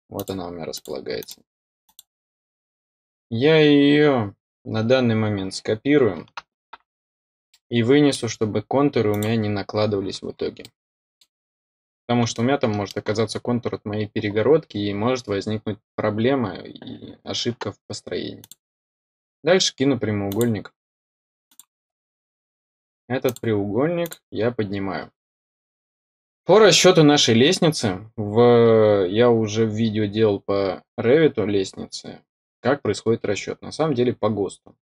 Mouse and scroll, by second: 0.1 click, 0.7 click, 1.1 click, 1.8 click, 7.4 middle click, 9.0 click, 10.5 middle click, 11.2-12.3 scroll down 1, 12.3 middle click, 13.0-18.3 scroll up 1, 18.3 click, 20.2 click, 21.4 click, 23.2 click, 24.0 click.